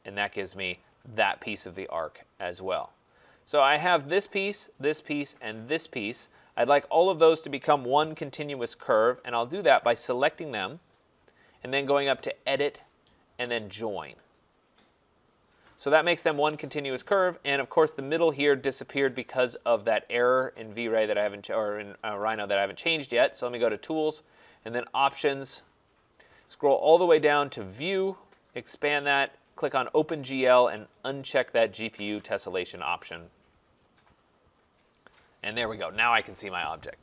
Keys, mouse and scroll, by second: 0.4 click, 1.2 click, 2.9 click, 3.9 click, 4.8 click, 5.8 click, 9.0 click, 12.9 click, 14.7 click, 17.4 click, 21.9 click, 24.6 click, 26.8 click, 28.2 click, 29.6 click, 32.7 click, 34.0 click.